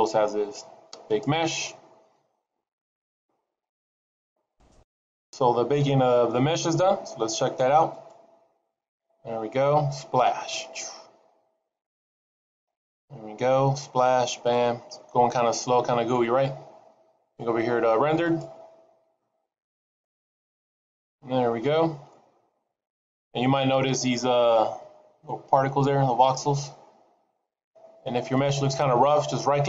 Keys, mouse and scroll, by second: 1.0 click, 7.8 click, 20.1 click, 22.6 middle click, 26.9-29.2 scroll up 2, 29.2 right click.